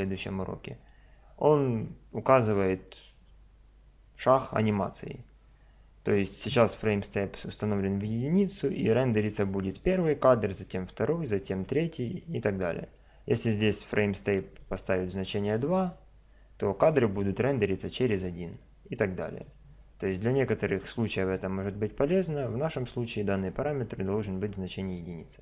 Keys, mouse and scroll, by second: 9.7-11.6 drag, 14.6-16.5 drag, 17.4-19.4 drag, 20.8-22.7 drag.